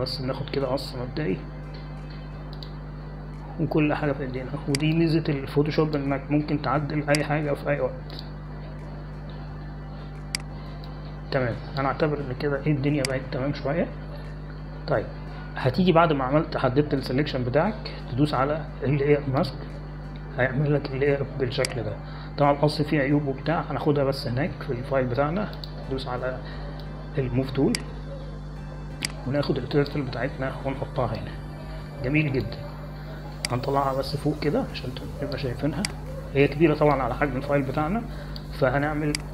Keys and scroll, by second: 6.8 space, 12.8 space, 15.4 ctrl+0.